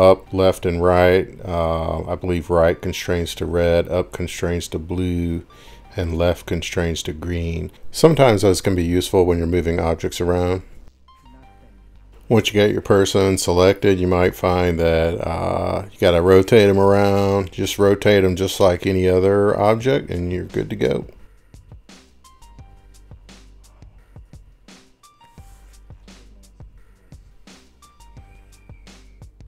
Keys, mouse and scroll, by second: 1.0 click, 1.2 click, 7.5 click, 9.0 click, 10.2 click, 11.6 Up, 11.7 Right, 12.1 Right, 12.1 click, 12.8 scroll down 2, 12.8 scroll down 7, 13.1 scroll up 1, 13.2 scroll down 2, 13.5 scroll up 1, 13.5 scroll, 14.4 click, 17.3 click, 21.6 click, 24.3 click, 27.6-28.6 scroll, 28.2 ctrl+shift+r.